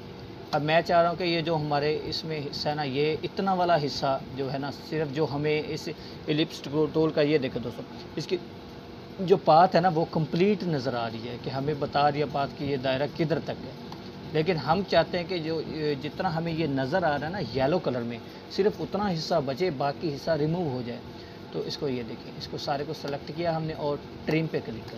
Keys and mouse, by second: 0.1 space, 0.5 click, 0.6-1.4 space, 2.2-2.8 click, 15.0 click, 23.1-23.7 drag.